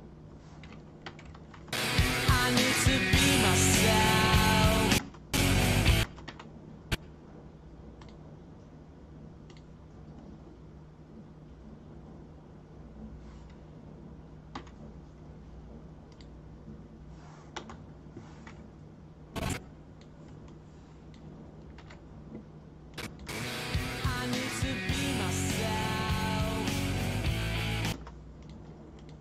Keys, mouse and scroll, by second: 1.0 i, 1.7 space, 5.0 space, 5.3 space, 6.0 space, 6.2 o, 8.0 click, 9.5 click, 14.5 ., 16.1 click, 19.3-20.0 drag, 20.4 click, 21.7 shift+d, 22.9 click, 23.2 space, 27.9 space, 28.4 click, 28.9 click.